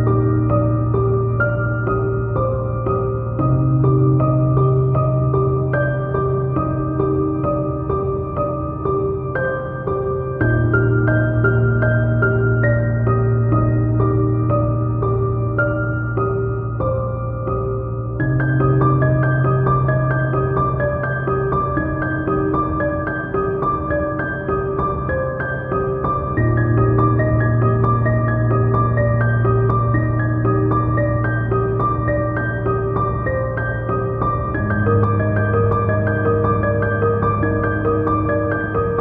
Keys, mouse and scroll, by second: 0.0 scroll up 1, 0.2 click, 0.5-2.6 typing, 0.8 click, 1.1 click, 1.2 scroll down 1, 1.3 scroll up 1, 1.4-2.0 scroll down 3, 1.9 click, 2.0 scroll up 1, 2.1 scroll down 1, 2.3 scroll up 1, 2.4-3.0 shift+middle drag, 3.0 click, 4.2-5.0 middle drag, 4.3 KP_7, 4.6 scroll up 2, 4.7 Tab, 5.0 click, 5.6 x, 5.8 click, 5.9 middle click, 6.1 KP_1, 6.2 scroll up 2, 6.3 a, 6.9 click, 6.9 scroll up 2, 7.0 shift+click, 7.2 click, 7.7 click, 7.9 scroll down 1, 8.1 scroll up 1, 8.2 shift+middle click, 8.4-10.8 typing, 9.2 click, 9.5 click, 10.4 click, 10.5 Tab, 10.6 middle click, 10.7 click, 10.9 click, 10.9 click, 11.2 middle click, 11.3 ctrl+r, 11.4 Escape, 11.6 click, 11.9 click, 11.9 x, 12.2 KP_7, 12.9 g, 14.7 click, 14.9-17.6 middle drag, 15.4 KP_1, 16.4 scroll up 2, 16.9 g, 17.6 click, 18.6-19.2 scroll up 2, 20.6 middle click, 20.8 KP_7, 20.9-21.2 scroll down 2, 21.3 KP_7, 21.4 g, 21.5 click, 22.0 click, 22.1 e, 23.1 click, 23.2 middle click, 23.4 KP_7, 23.6 g, 23.9 click, 24.2 middle click, 24.4 Tab, 24.7 click, 25.5 middle click, 25.6 z, 26.0 Tab, 26.1 2, 26.5 alt+click, 37.2 KP_7, 37.4-39.0 middle drag, 37.9 KP_1, 38.5 KP_7, 38.9 ctrl+r.